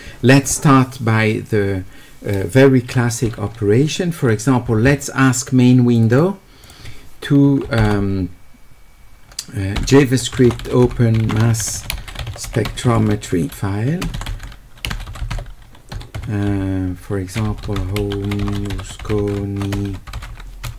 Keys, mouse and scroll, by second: 6.0 click, 6.1 click, 6.6 click, 9.9-12.8 typing, 14.2 w, 14.9 e, 15.3 e, 17.9-19.3 typing.